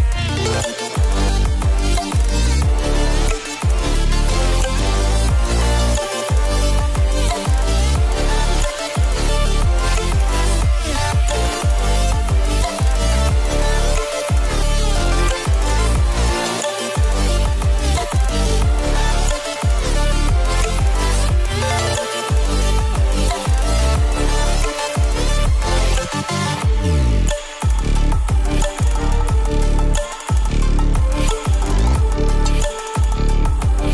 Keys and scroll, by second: 1.0 ctrl+space, 1.5 ctrl+space, 3.3 space, 4.4 ctrl+b.